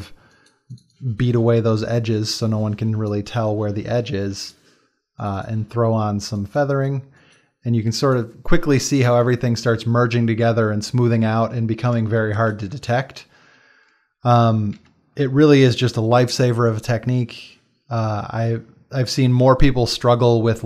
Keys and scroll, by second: 8.6 space, 12.3 ctrl+space, 14.8 ctrl+w.